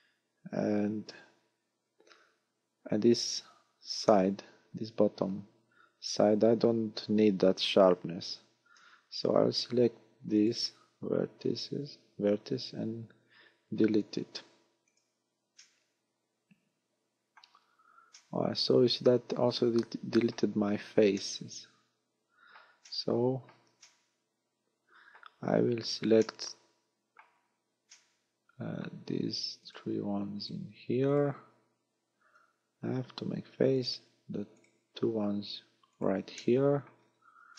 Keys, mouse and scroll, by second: 2.0-2.4 scroll up 5, 4.1 middle click, 7.5 scroll down 2, 8.0-8.3 scroll up 2, 8.3 a, 8.8 z, 9.2 scroll up 1, 10.4 right click, 12.7 x, 15.6 middle click, 17.4-18.2 scroll down 4, 18.2 middle click, 21.2 middle click, 22.9 shift+middle click, 23.8 middle click, 25.5-26.2 scroll up 7, 26.2 shift+middle click, 27.9 middle click, 29.6 right click, 30.4 shift+right click, 31.2 shift+right click, 32.8 f, 33.8 right click, 34.6 right click, 36.0 shift+right click, 36.4 middle click, 37.0 scroll down 5.